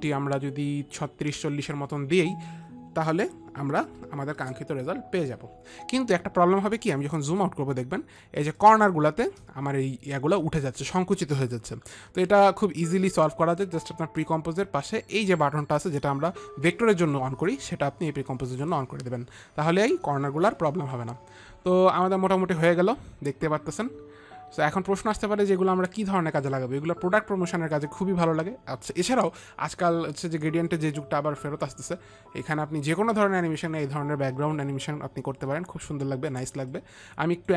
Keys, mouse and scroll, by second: 2.8 click, 4.1 KP_4, 4.2 KP_0, 4.9 Return, 8.4 Return, 8.4 KP_0, 8.9 space, 9.1 click, 19.1 click, 23.2 click, 37.2 click.